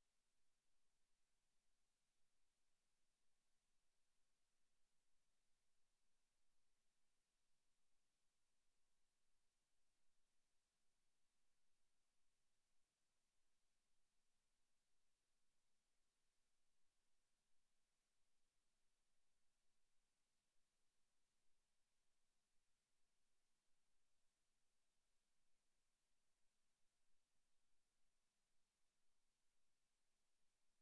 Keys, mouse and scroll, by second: 1.0 click, 3.8 Tab, 4.5 a, 4.9 alt+shift+right click, 6.3 shift+s, 7.0 Tab, 10.3 space, 12.0 shift+a, 16.8 KP_7, 17.8 Tab, 18.2 right click, 18.4 x, 19.2 right click, 19.3 x, 20.0 middle click, 20.9 right click, 21.1 x, 22.3 middle click, 23.0 middle click, 23.4 z, 24.0 right click, 24.3 x, 24.9 middle click, 25.2 Tab, 25.5 scroll down 6, 25.8 scroll up 1, 26.0 Tab, 26.7 a, 27.0 a, 27.3 alt+shift+right click, 27.8 s, 29.9 click, 30.1 middle click, 30.6 Tab.